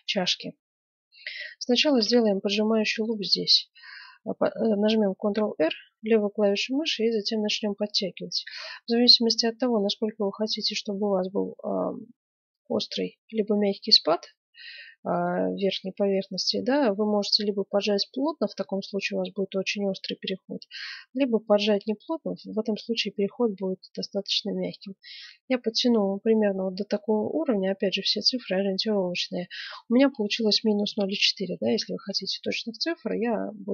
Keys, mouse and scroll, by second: 1.8 ctrl+r.